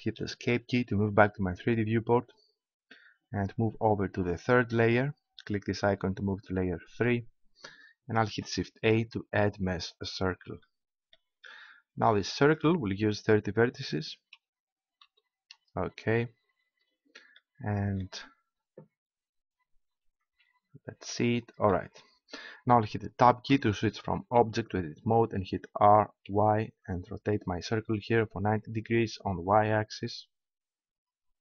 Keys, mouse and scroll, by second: 4.7-6.4 drag, 6.4-8.2 middle drag, 8.2 shift+a, 11.6 click, 19.1 KP_5, 20.2 KP_Decimal, 23.5 Tab, 25.8 r.